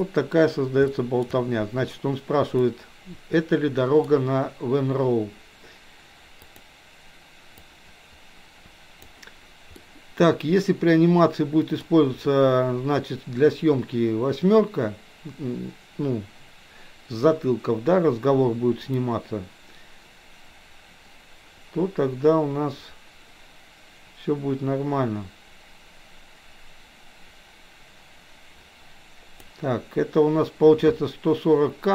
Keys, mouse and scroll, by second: 0.8-1.2 shift+middle drag, 2.7-4.1 middle drag, 6.4 click, 7.6-9.1 drag, 9.7-11.7 middle drag, 19.1-29.4 drag.